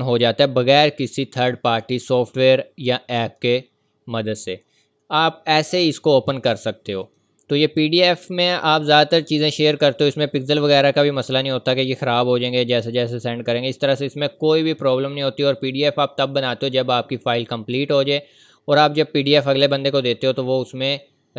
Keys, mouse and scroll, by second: 7.0 click, 15.5 click.